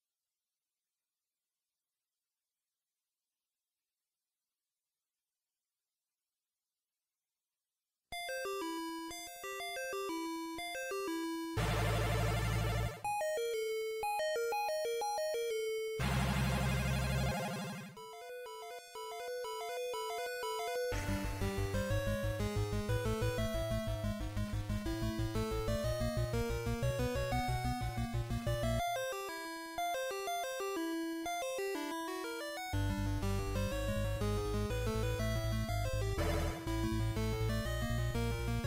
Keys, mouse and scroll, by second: 1.8 middle click, 5.6-6.0 scroll up 3, 6.3 middle click, 6.3 scroll up 2, 8.8-9.6 scroll down 2, 9.6 middle click, 11.3 Tab, 11.8-12.2 scroll down 1, 12.6 middle click, 12.6-13.0 scroll down 2, 15.6-16.0 scroll down 1, 16.6-17.2 scroll down 2, 17.2 click, 19.3 scroll up 2, 19.6 KP_1, 21.0 Tab, 21.8 shift+middle click, 23.0-23.3 scroll up 2, 24.0-24.6 scroll up 1, 25.8-26.2 scroll down 1, 26.6-27.4 scroll down 4, 27.0 Tab, 28.0-28.8 scroll up 4, 28.8-30.0 scroll down 2, 30.0 scroll down 1, 30.4 click, 32.8 click, 38.0 scroll down 1.